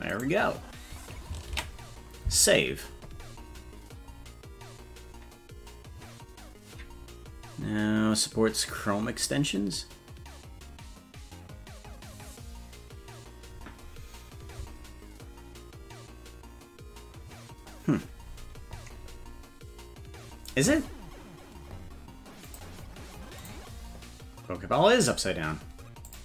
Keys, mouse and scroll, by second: 0.2 right click, 1.7 ctrl+s.